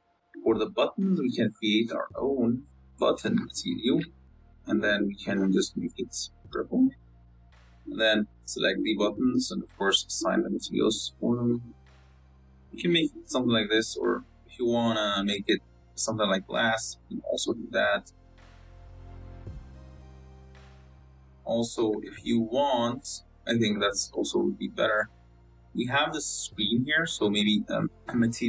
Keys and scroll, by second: 4.2 t, 8.4 Tab, 9.4 l, 9.8 z, 11.7 Tab, 12.3 z, 21.6 Tab, 22.1 z, 24.0 z.